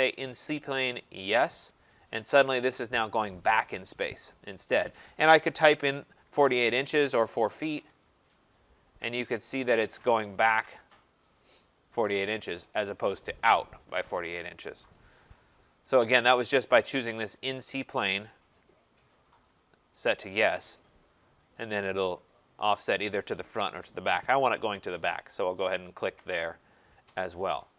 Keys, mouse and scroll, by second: 1.4 click, 6.0-8.0 typing, 6.3 click, 9.6 Return, 10.5 middle click, 10.7-11.4 scroll, 17.8 click, 19.6 click, 25.6 click, 26.4-26.9 scroll.